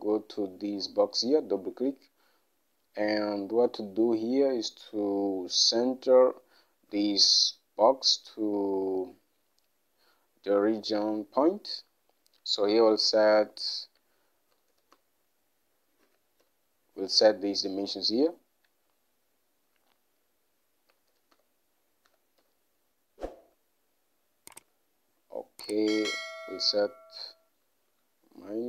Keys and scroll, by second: 7.0 Home, 14.7-16.7 typing, 20.8-22.5 typing, 24.1-24.8 typing, 28.0 -.